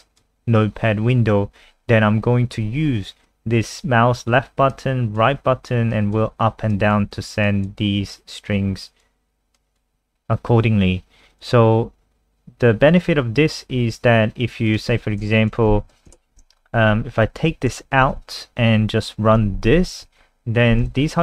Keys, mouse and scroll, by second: 15.6 Left, 15.8 shift+End, 16.1 shift+Left, 17.6 ctrl+x, 18.1 ctrl+s, 19.3 F5, 20.8 super+n.